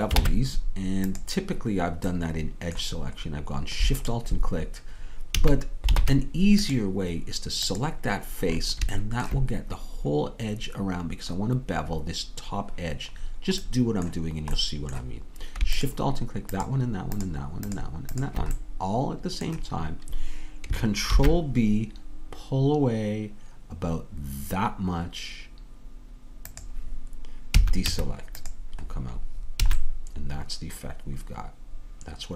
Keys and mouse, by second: 0.2 ctrl+Tab, 4.2-6.1 drag, 5.4 a, 6.1 ctrl+Tab, 8.5-13.9 drag, 19.2-21.2 drag, 21.2 ctrl+b, 27.6 a, 28.0 Tab, 29.7 a.